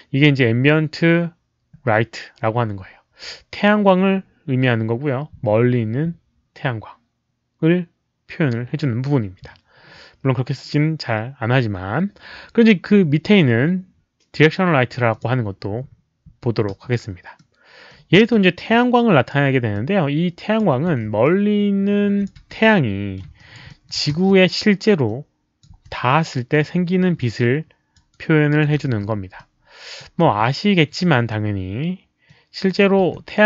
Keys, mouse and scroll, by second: 15.1 click, 16.2 w, 16.6 r, 17.3 middle click, 18.1 e, 18.6 click, 19.7 click, 20.7 w, 21.2-22.2 alt+drag, 22.4 w, 22.5-23.1 middle drag, 23.3 alt+right click, 23.6 alt+middle click, 24.1 e, 25.0 alt+click, 25.0 middle click, 25.0 w, 25.6 w, 26.0 middle click, 27.1 alt+click, 28.1 alt+right click, 28.9 e, 29.3 click, 30.4 alt+click, 32.2 click, 32.5-33.4 typing, 32.7 alt+right click, 32.7 middle click.